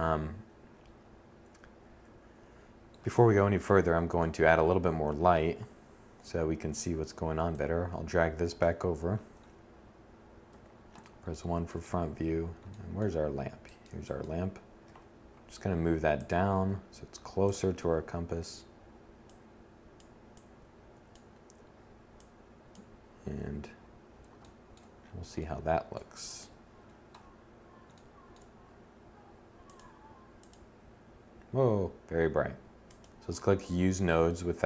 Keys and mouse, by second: 2.2 1, 3.5 Tab, 9.5 1, 13.9 g, 14.6-15.0 drag, 15.5 g, 16.6 click, 16.9 7, 20.2 KP_1, 25.5 KP_7, 30.6-31.9 middle drag.